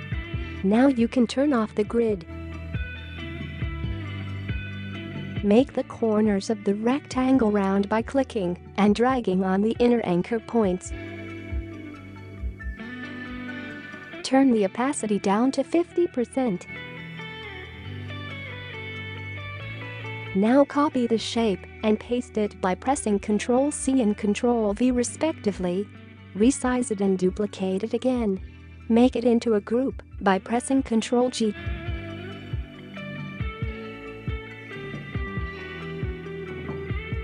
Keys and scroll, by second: 17.7 typing, 18.2 Return, 20.8 ctrl+c, 21.9 ctrl+v, 26.7 ctrl+c, 27.6 ctrl+v, 33.4 ctrl+g.